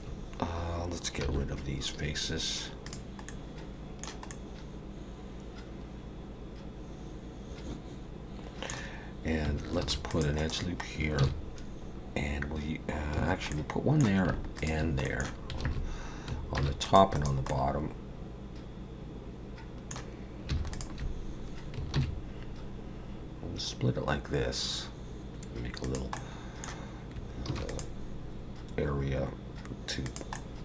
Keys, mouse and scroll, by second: 1.2 x, 3.3 middle click, 4.3 middle click, 9.8 ctrl+r, 11.2 ctrl+b, 13.5 middle click, 14.6 shift+click, 15.0 middle click, 15.7 alt+a, 16.6 ctrl+r, 17.5 middle click, 20.7 alt+shift+click, 22.0 ctrl+b, 26.2 middle click, 27.5 ctrl+r, 30.4 middle click.